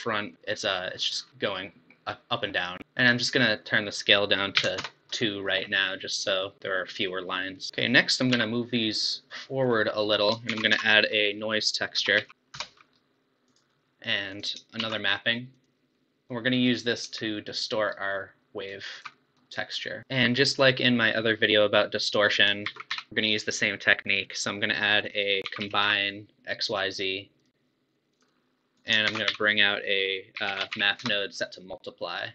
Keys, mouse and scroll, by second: 0.3 scroll up 4, 0.5-1.2 middle drag, 1.2 scroll down 5, 1.3-2.8 middle drag, 2.8 ctrl+z, 4.0-5.6 drag, 5.6 scroll down 3, 5.9-7.7 middle drag, 7.7 click, 8.3 g, 9.7-10.1 scroll up 5, 10.1 click, 10.5 shift+a, 12.3 BackSpace, 14.3 click, 14.9 shift+d, 16.0-17.9 middle drag, 17.9-19.2 alt+right drag, 19.2-20.0 middle drag, 22.3 click, 22.7 shift+a, 28.7 click, 29.0 shift+a.